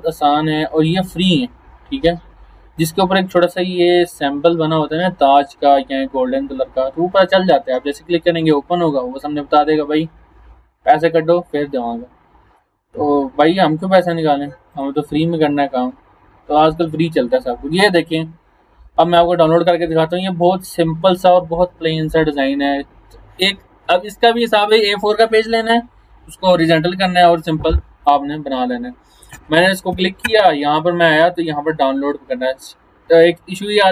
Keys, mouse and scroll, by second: 1.6 scroll up 1, 2.6 scroll up 1, 10.1 scroll down 1, 11.8 scroll down 1, 14.7 click, 18.4 scroll down 1, 18.9 scroll up 1, 19.5 scroll up 1, 28.0 click, 31.4 click.